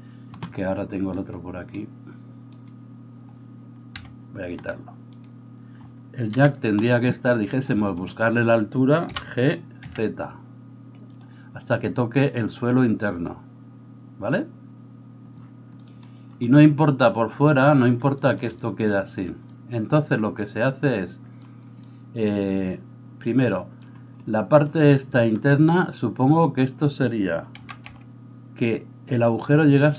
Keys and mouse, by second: 2.6-4.0 right drag, 4.0-17.7 middle drag, 4.0 g, 6.3 KP_1, 9.0 g, 17.7 click, 18.0-29.9 shift+middle drag, 27.5 g.